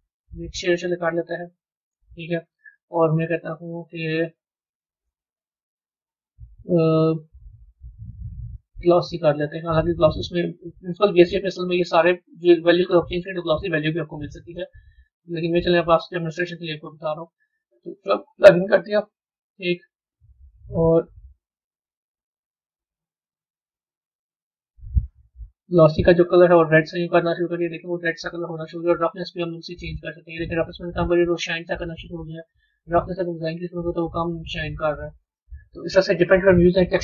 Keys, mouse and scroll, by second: 36.7 click.